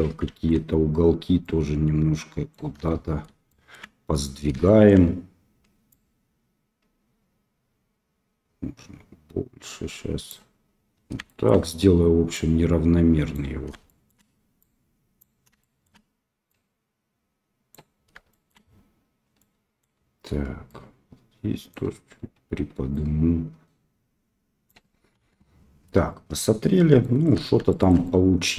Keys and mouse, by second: 0.3 shift+middle click, 0.4 shift+click, 0.5-2.3 drag, 2.3 right click, 2.8 shift+middle click, 3.4 shift+middle click, 4.6 shift+middle click, 5.2-11.4 middle drag, 13.8 shift+middle click, 14.6 right click, 15.5 shift+middle click, 16.5-17.7 right drag, 18.3 shift+middle click, 19.3 middle click, 20.7-21.7 right drag, 22.9-24.7 right drag, 25.1 KP_1, 27.0 shift+middle click, 27.6 shift+middle click, 28.0 middle click.